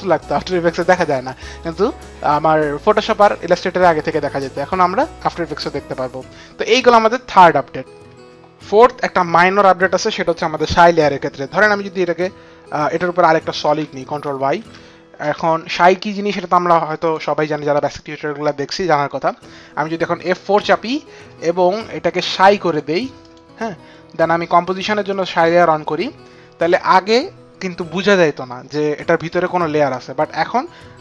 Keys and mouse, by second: 0.0 click, 12.3 click, 14.4 Return, 16.9 click, 22.5 click, 24.9 click.